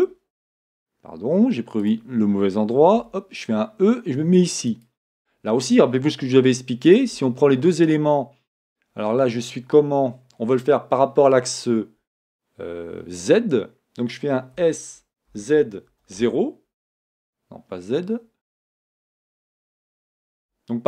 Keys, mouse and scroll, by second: 2.0 click, 3.0 e, 7.0 shift+click, 7.4 scroll down 1, 8.1 scroll up 1, 8.6 scroll down 1, 9.6-10.1 scroll up 1, 10.1 scroll down 1, 14.7 e, 18.7 scroll up 1, 18.7 s, 19.2-20.8 scroll down 1.